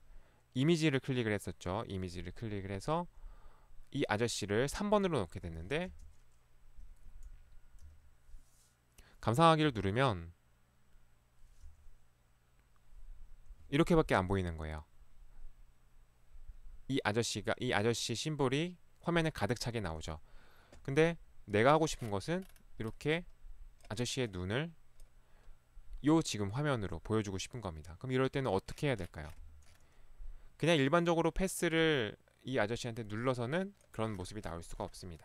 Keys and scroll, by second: 5.4 Escape, 6.0 space, 7.9 Right, 9.7 Right, 11.6 Right, 29.4 Escape.